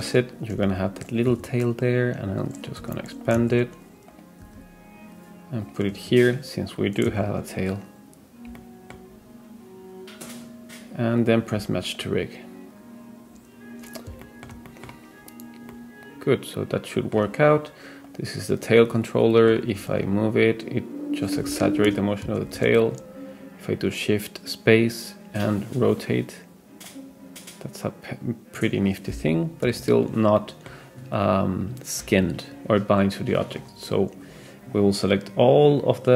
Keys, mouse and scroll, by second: 0.6 g, 1.3 s, 2.8 g, 3.4 s, 4.5 g, 6.0 r, 7.1 s, 8.6 middle click, 9.1-10.1 scroll up 2, 11.9 click, 13.3-14.1 scroll down 2, 14.3-14.7 shift+middle drag, 15.2-15.7 scroll up 2, 15.7-17.2 middle drag, 18.1 click, 18.8-19.6 middle drag, 19.8 r, 21.8-22.3 scroll down 2, 22.5 shift+space, 26.9-30.0 drag, 30.4-30.7 middle drag, 31.5-32.2 drag, 34.3 scroll up 1, 35.7 click.